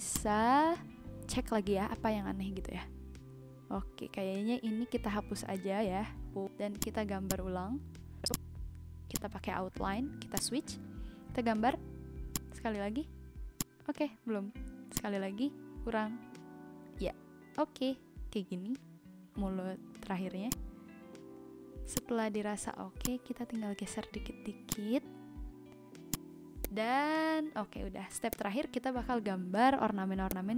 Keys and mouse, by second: 0.1 click, 2.6 Delete, 4.0 click, 4.3 Delete, 6.8 click, 8.3 click, 9.1 click, 9.9 ctrl+z, 10.3 click, 11.9 z, 12.3 click, 13.6 click, 14.9 click, 19.5 v, 20.4 click, 23.0 click, 24.6 click, 26.1 click, 26.5 z, 26.6 click, 28.3 click, 30.3 click.